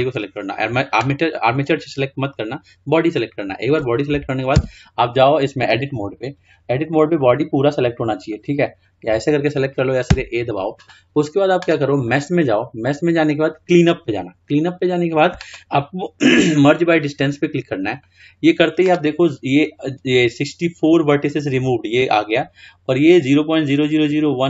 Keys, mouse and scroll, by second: 4.8 Tab, 8.4 click, 10.2 a, 12.2-15.1 drag.